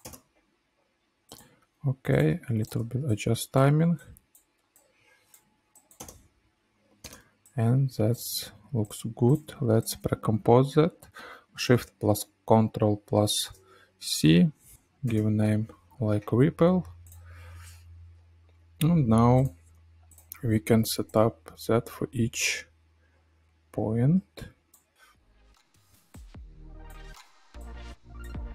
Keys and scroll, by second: 0.1 space, 5.9 space, 13.2 ctrl+shift+c, 14.5-15.6 typing, 25.6 space, 26.7 space, 27.2 space.